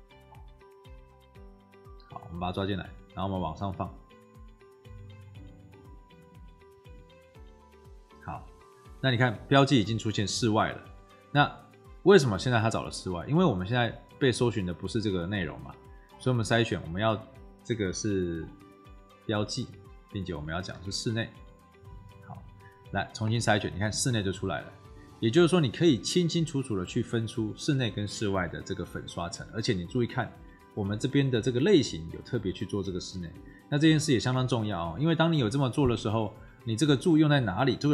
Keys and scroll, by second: 20.7 ctrl+v, 21.8 BackSpace.